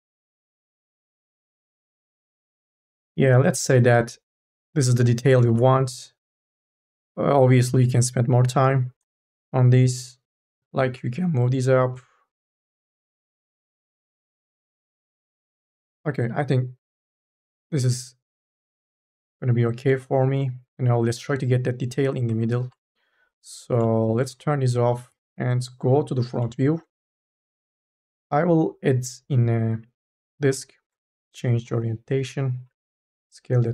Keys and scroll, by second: 5.6 ctrl+z, 7.9 ctrl+z, 8.7 1, 8.9 space, 11.0 ctrl+z, 17.3 q, 24.3 4, 24.6 3, 24.8 4, 25.0 e, 27.1 4, 32.4 e, 33.0 t.